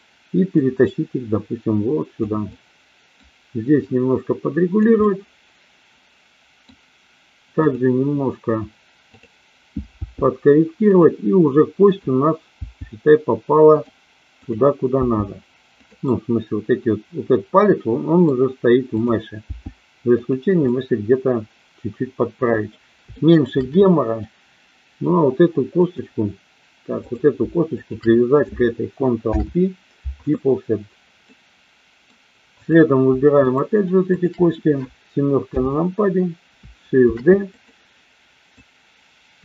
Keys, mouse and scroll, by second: 0.5-2.1 drag, 2.5 middle click, 3.9-4.9 drag, 5.0-6.7 middle drag, 9.0 click, 10.0 g, 10.9 click, 12.5 g, 14.5 click, 15.0 g, 15.7 click, 16.0-18.2 middle drag, 19.0 click, 19.4 g, 20.6-22.7 middle drag, 23.1 shift+middle click, 23.9 middle click, 25.7 click, 26.9 click, 27.7 shift+click, 29.2 ctrl+p, 31.2 middle click, 33.4 shift+click, 34.1 shift+click, 35.4 KP_7, 37.0 shift+d, 37.5 click, 38.5-39.4 drag.